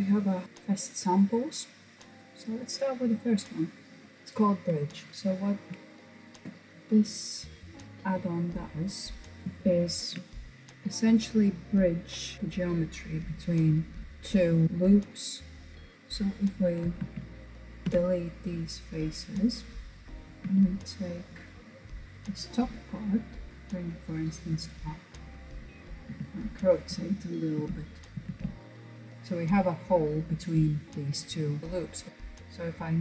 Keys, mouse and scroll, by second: 0.0-0.4 scroll down 1, 0.4-1.3 scroll up 5, 1.3 click, 4.5-4.9 scroll down 1, 4.9 shift+middle click, 5.1-6.8 scroll up 2, 6.8-7.2 scroll up 1, 7.2 click, 9.4-11.7 shift+middle drag, 15.7 KP_1, 16.1 alt+z, 17.2 Delete, 19.0-20.1 middle drag, 20.1 KP_1, 20.5 click, 22.8 g, 24.1 scroll down 1, 24.3-25.6 middle drag, 25.6 r, 28.1 alt+z, 31.6-32.1 scroll up 2.